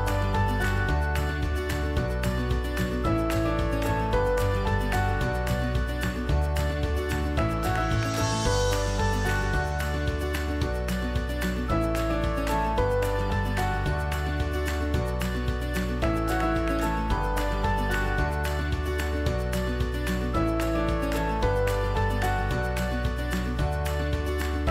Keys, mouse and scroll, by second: 6.8-14.9 alt+shift+drag, 18.4 shift+click, 23.0-24.7 alt+shift+drag.